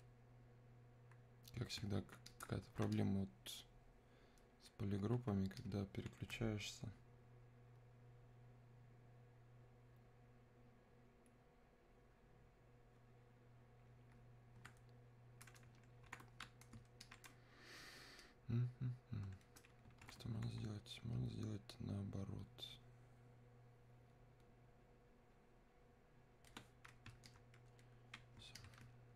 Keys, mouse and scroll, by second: 17.1-29.1 alt+drag.